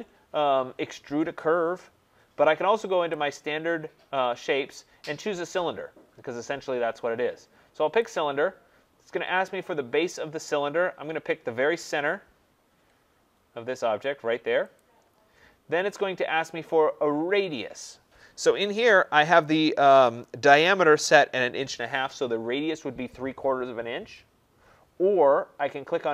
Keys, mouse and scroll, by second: 7.9 click, 12.9 middle click, 14.8 click.